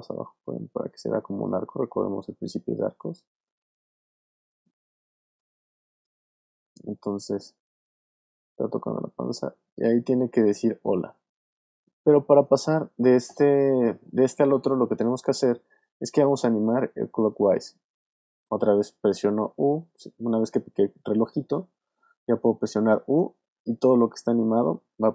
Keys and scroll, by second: 23.3 u.